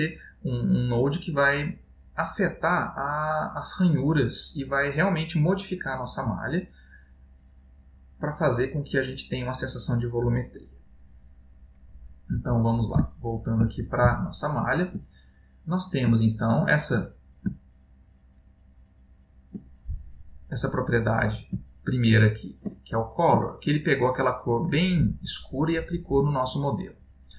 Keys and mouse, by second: 13.0 ctrl+space, 14.3 ctrl+middle click, 15.3 middle click, 16.4 ctrl+middle click, 17.7 middle click, 18.7 ctrl+middle click, 20.5 middle click, 21.7 middle click, 23.0 ctrl+middle click, 23.8 ctrl+middle click.